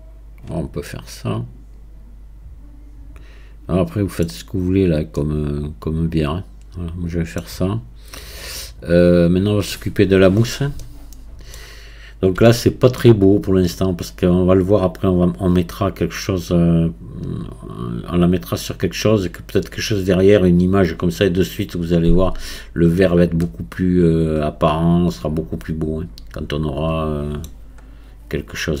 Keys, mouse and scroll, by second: 0.9-3.9 middle drag, 5.2-8.2 middle drag, 10.4-10.8 scroll down 1, 10.8-12.1 middle drag, 12.1-12.5 scroll up 1, 12.5-15.5 shift+middle drag, 22.1-23.0 scroll up 1, 23.0-23.4 scroll down 1, 23.4-26.5 middle drag, 27.9-28.8 scroll up 2.